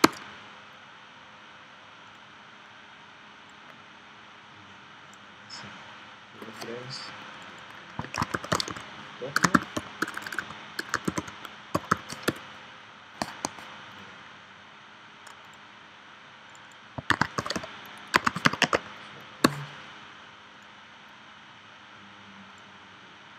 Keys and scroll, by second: 0.0 Return, 7.9-11.8 typing, 12.3 Return, 17.1 shift+s, 18.2 typing, 19.5 Return.